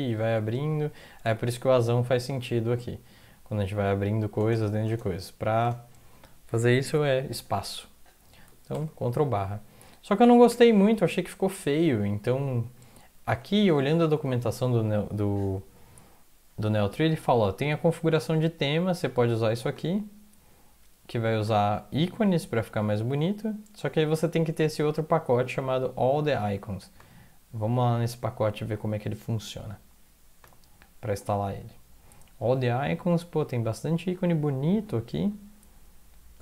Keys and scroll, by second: 0.0-0.2 typing, 1.3-4.3 typing, 5.1 Up, 5.6 Up, 5.6 typing, 8.7 ctrl+\, 10.5 Home, 11.4 Up, 11.6 Up, 11.8 Up, 12.5 Down, 13.3 alt+Tab, 15.3 typing.